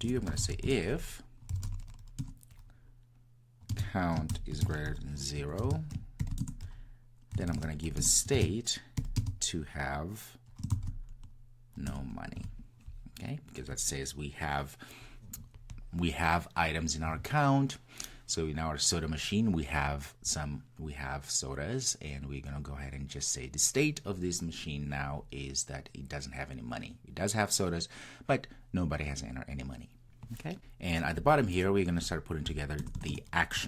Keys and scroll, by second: 0.7 Return, 8.0 Return.